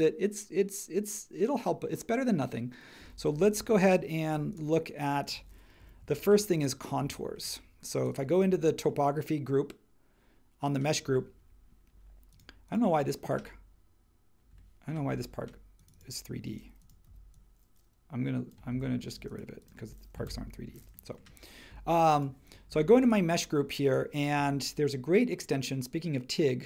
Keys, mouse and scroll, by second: 5.8 j, 17.0 p, 18.7 super+z, 20.2 BackSpace.